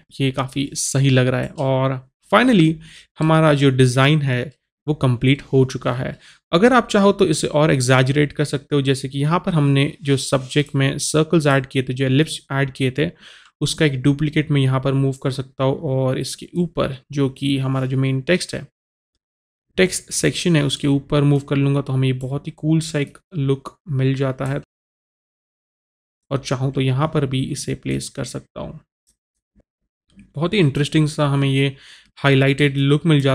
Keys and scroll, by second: 0.0 Delete.